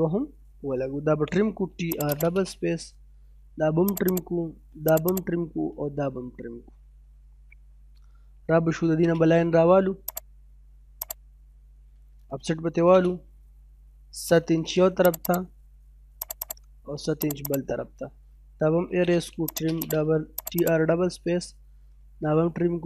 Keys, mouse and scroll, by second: 0.0-0.3 scroll down 1, 1.1-1.5 typing, 1.9 click, 2.5-2.8 scroll down 1, 2.8 middle click, 3.3 middle click, 3.9 click, 5.4 scroll down 1, 5.6 middle click, 6.8 scroll up 1, 7.1 middle click, 8.2 l, 8.4 space, 8.8 middle click, 10.0 middle click, 12.2 o, 12.3 space, 13.8 7, 14.1 space, 14.3-15.0 scroll up 1, 15.1 click, 16.7-17.2 scroll up 1, 17.2 click, 18.0-19.3 typing, 19.5 click, 20.9-21.4 scroll down 1, 21.4 middle click, 21.8 scroll down 1, 22.0 middle click.